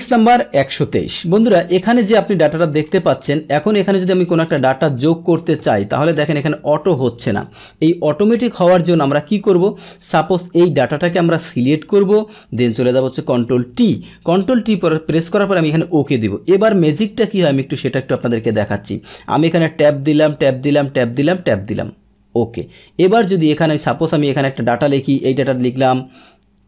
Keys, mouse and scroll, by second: 0.4-4.3 middle drag, 4.3 click, 6.1 Return, 7.3 click, 8.3 Delete, 8.6-10.1 middle drag, 10.1-12.8 drag, 13.6 ctrl+t, 15.6 click, 16.6-18.4 middle drag, 18.4 click, 19.6 Tab, 20.2 Tab, 20.8 Tab, 21.4 Tab, 23.0 click, 24.4 click, 25.5 Tab.